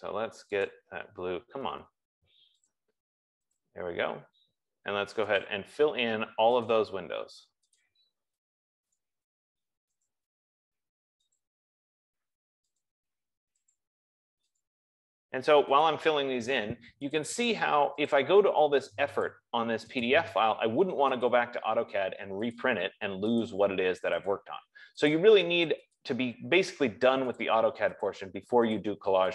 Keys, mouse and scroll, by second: 0.9 click, 3.1 click, 4.0 click, 5.8 click, 7.0 click, 14.1 click, 14.9 click, 16.3 click, 17.7 click, 18.5 click, 19.6 click, 20.5 click, 21.7 click, 22.9 click, 23.8 click, 24.7 click, 25.6 click, 26.3 click, 27.7 click, 28.5 click.